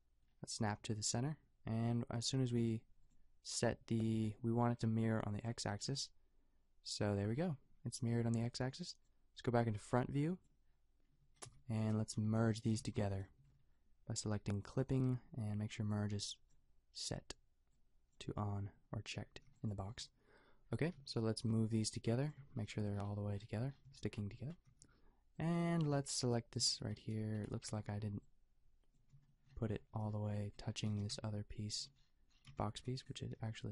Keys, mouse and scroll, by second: 11.2 middle click, 11.5 Tab, 12.3 a, 12.7 b, 13.4 a, 19.3 b, 20.9 g, 22.4 a, 24.7 b, 27.1 b, 27.8 b, 30.8 g, 33.3 g.